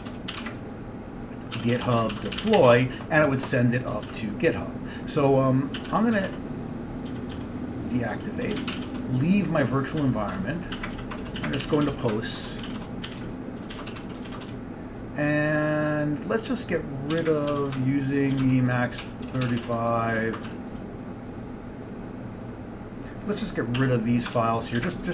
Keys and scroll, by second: 0.0-3.3 typing, 4.2 ctrl+c, 5.6-15.1 typing, 17.0-20.2 typing, 18.5 Tab, 23.9-25.1 typing, 24.4 Return.